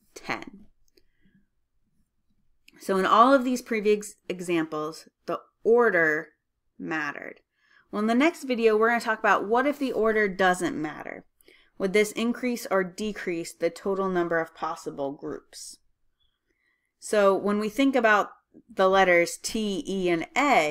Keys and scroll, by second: 5.2-5.9 typing.